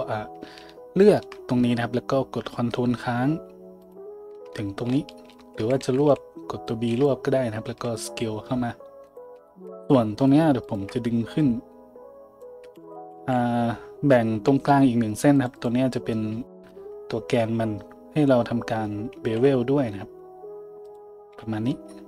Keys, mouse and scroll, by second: 3.8 ctrl+click, 5.6 a, 5.9 b, 6.0 middle click, 6.2 middle click, 7.7-10.2 middle drag, 7.7 s, 9.7 a, 10.2 click, 10.2 shift+middle click, 10.6 shift+click, 10.7 shift+middle click, 11.4-15.7 drag, 12.8 ctrl+z, 13.2 a, 14.7 ctrl+r, 15.7-22.0 middle drag, 19.2 ctrl+b, 21.3 a.